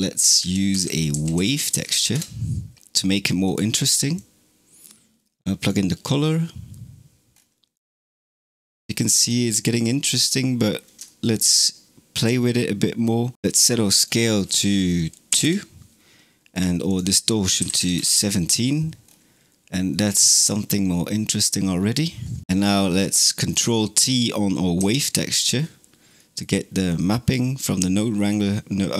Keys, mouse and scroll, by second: 4.0 click, 7.2-8.4 scroll up 7, 8.4-9.3 middle drag, 9.3 scroll up 2, 10.0-11.4 middle drag, 11.4 scroll up 2, 13.8-18.9 drag, 18.9 scroll up 3, 19.8-22.4 middle drag, 22.5 scroll down 1, 22.7-23.3 middle drag, 23.3 click, 24.6 ctrl+t, 26.0 middle click, 26.7 click, 27.9-28.9 middle drag.